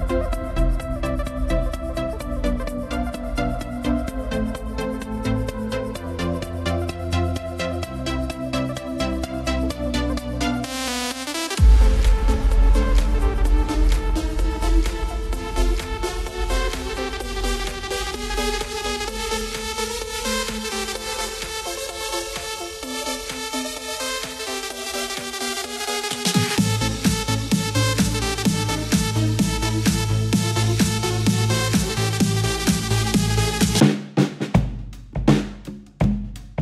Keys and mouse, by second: 0.7 s, 3.1 click, 4.8 e, 7.3 click, 9.4 s, 10.4 click, 13.2 e, 17.2 click, 19.2 r, 21.3 click, 23.4 s, 25.5 click, 28.0 e, 33.2 click, 35.6 s.